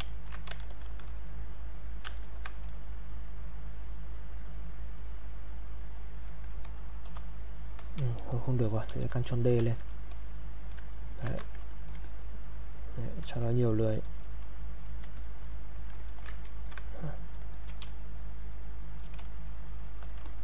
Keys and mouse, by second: 0.2 ctrl+click, 0.7 shift+f, 1.1 click, 2.8 click, 7.0 shift+f, 8.9 ctrl+d, 9.6 ctrl+d, 10.1 click, 10.9 ctrl+right click, 11.3 ctrl+click, 12.0 click, 13.7 click, 14.5 click, 16.0 alt+click, 16.3 ctrl+right click, 16.9 click, 17.8 space, 18.2 click, 18.4 space, 19.5 click, 19.5 shift+click.